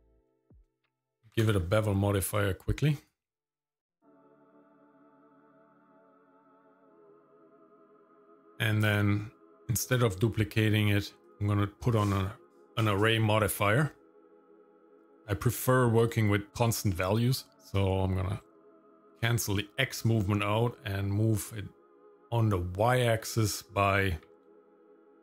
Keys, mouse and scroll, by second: 0.5 click, 2.8 click, 4.6 click, 5.0 click, 6.2 right click, 7.2 right click, 8.5 click, 8.8-11.9 drag, 14.9 click, 15.1 click, 16.0 click, 17.5-19.1 drag, 22.8-25.2 drag, 24.6 KP_0.